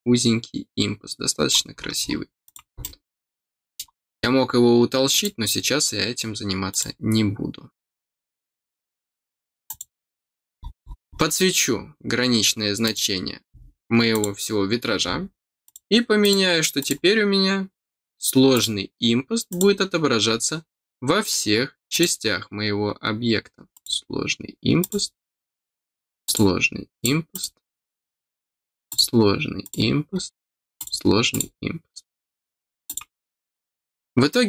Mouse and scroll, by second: 1.7 scroll down 1, 2.4 click, 2.8-3.8 middle drag, 3.8 scroll down 1, 5.1 click, 6.7 click, 9.6 click, 10.3 scroll down 1, 10.8-11.3 scroll down 4, 12.8 click, 14.1 click, 15.6 click, 16.2 click, 16.7 click, 18.5 click, 19.4 click, 20.2-20.5 scroll down 2, 21.2 click, 21.9 click, 22.7 scroll down 2, 23.0 middle click, 23.7 click, 24.8 click, 25.4 middle click, 26.2 click, 26.9 click, 27.3 click, 27.8 scroll down 2, 28.8 click, 29.6 click, 30.1 scroll down 2, 30.7 click, 31.3 click, 32.8 click, 33.7 scroll up 1.